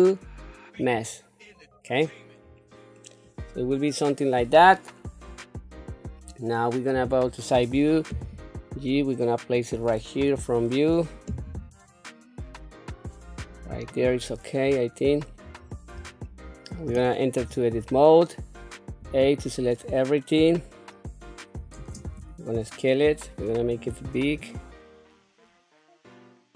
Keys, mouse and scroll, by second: 2.3 scroll down 1, 2.8-4.2 middle drag, 4.8 scroll down 3, 6.8 KP_3, 8.0 g, 10.0 KP_1, 11.3 g, 14.6 shift+middle click, 15.4-15.8 scroll up 3, 16.1 shift+middle click, 17.2 Tab, 18.8 a, 19.6-20.3 scroll down 1, 20.5-21.4 scroll up 1, 21.6 shift+space, 23.6-25.5 drag, 25.6 click, 25.9 shift+middle click, 26.0 scroll down 1, 26.0 shift+middle click, 26.2 click.